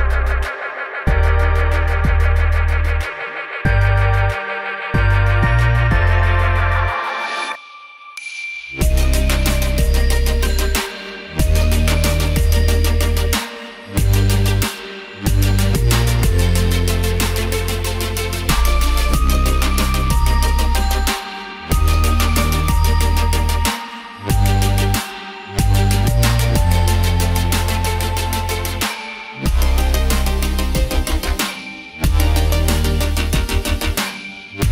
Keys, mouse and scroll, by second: 0.5 ctrl+z, 0.6 ctrl+z, 0.7 ctrl+z, 0.9 ctrl+z, 1.0 ctrl+z, 1.2 ctrl+z, 2.5 alt+scroll down 1, 3.3-3.7 scroll up 1, 3.8-4.2 scroll down 2, 4.8-5.6 scroll up 2, 5.8 right click, 6.4 click, 7.0 click, 8.3 click, 12.1-12.6 alt+scroll up 2, 12.6 click, 13.2 scroll down 1, 13.4 click, 16.4 click, 17.7 scroll down 1, 18.3 click, 22.0 scroll up 1, 22.3 click, 26.8 click, 29.7 click, 32.9 click, 33.5 click.